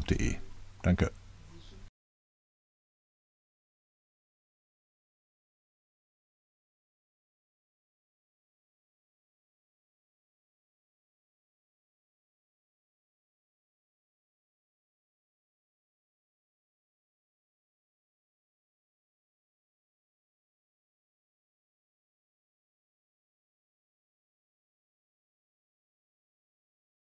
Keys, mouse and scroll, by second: 0.6 Return, 1.0 z, 2.3-5.6 typing, 6.6 Return, 6.8-8.3 typing, 8.9 Return, 9.4-13.3 typing, 11.0 Return, 14.0 Return, 14.5-16.3 typing, 17.4 Return, 18.5 click, 19.4 1, 20.1 click, 20.7 click, 21.6 click, 22.3-23.4 drag, 23.8 1, 24.3 click.